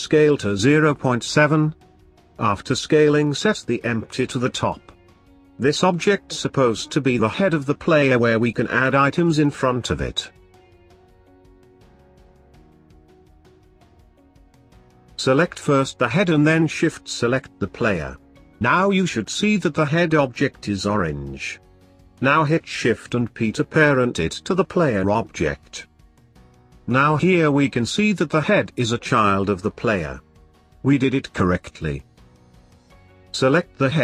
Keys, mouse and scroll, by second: 3.1-6.2 drag, 8.9 scroll up 2, 9.2-10.9 shift+middle drag, 10.9-12.5 drag, 16.1 click, 18.4 shift+click, 19.9 ctrl+p, 24.1 click, 25.8 click, 26.7-29.9 drag, 30.8 click, 32.2 shift+s.